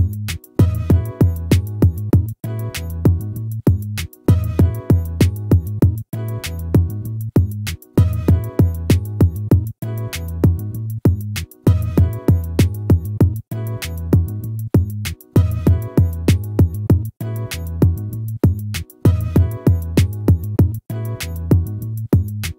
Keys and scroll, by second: 4.9 ctrl++, 15.4 ctrl+-, 20.3 ctrl+z, 22.0 ctrl++.